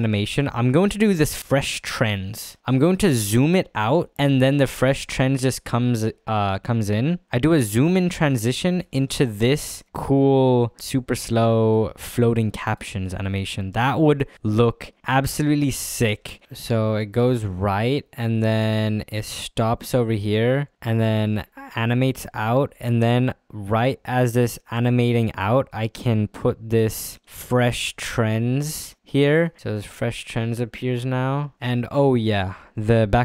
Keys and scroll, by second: 8.9 space.